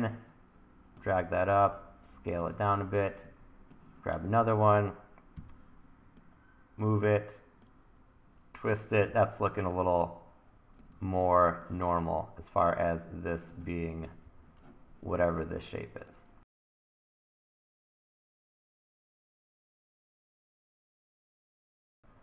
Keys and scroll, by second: 1.1 t, 5.4 e, 9.1 r, 14.2 t, 16.4 e, 19.9 t, 21.8 e.